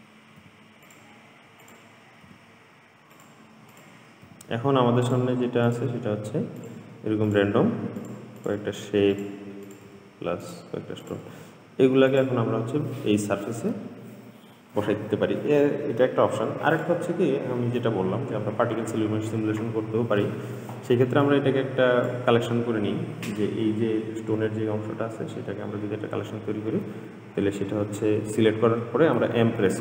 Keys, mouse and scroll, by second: 0.6 r, 1.9 click, 2.5 g, 4.0 click, 4.5 g, 5.9 click, 6.2 g, 7.5 click, 7.8 g, 8.6 click, 8.9 g, 9.9 click, 10.1 g, 11.3 click, 11.5 g, 12.8-13.5 scroll down 2, 13.5-14.9 scroll down 3, 15.7-16.9 scroll down 2, 16.9 click, 21.5 drag, 23.7-24.5 scroll down 2, 24.5-25.0 scroll up 2, 29.4 m.